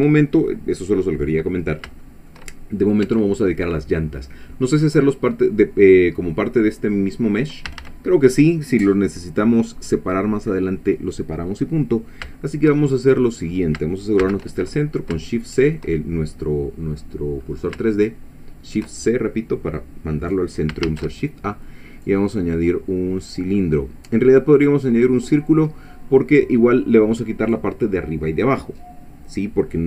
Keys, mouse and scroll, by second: 0.3-0.6 scroll down 1, 0.7 middle click, 1.7 scroll down 1, 2.0 shift+middle click, 2.5 shift+scroll down 1, 3.1 Tab, 3.5-4.7 middle drag, 7.7 a, 12.9 shift+middle click, 12.9-13.3 shift+scroll down 3, 13.5-13.8 scroll up 2, 14.2 shift+c, 14.9 shift+scroll up 3, 15.3 shift+click, 17.4-17.8 scroll up 3, 17.9-18.9 shift+middle drag, 20.9 shift+a, 24.6 click, 25.8 scroll down 2.